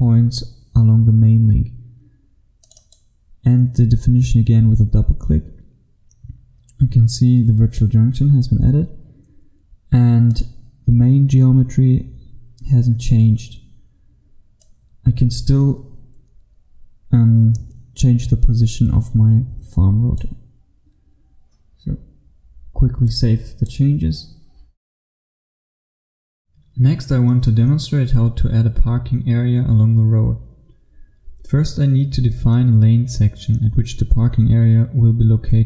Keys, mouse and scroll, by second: 25.8 F1.